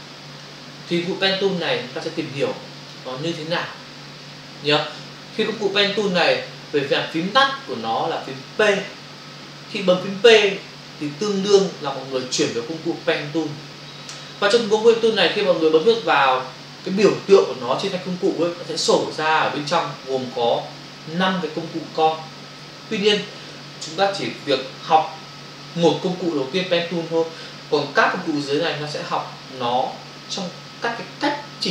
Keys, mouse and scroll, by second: 2.8 click.